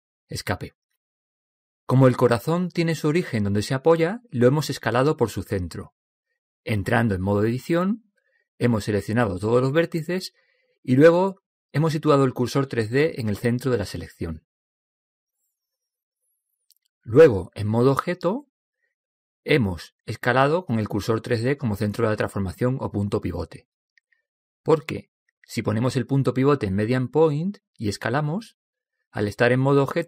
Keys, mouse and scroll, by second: 1.4 Escape, 7.6 Tab, 8.7 a, 9.5 a, 13.0 shift+s, 18.1 Tab, 20.1-21.9 drag, 23.4 s, 26.1-28.0 drag, 28.5 s.